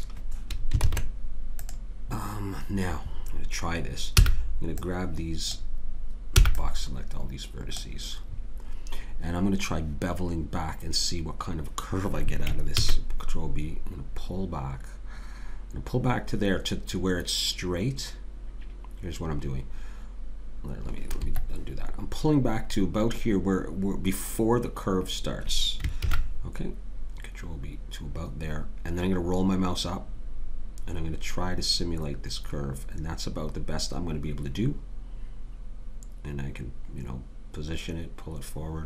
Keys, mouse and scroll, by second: 0.8 ctrl+Tab, 4.2 b, 6.4 b, 12.8 ctrl+b, 26.0 ctrl+b.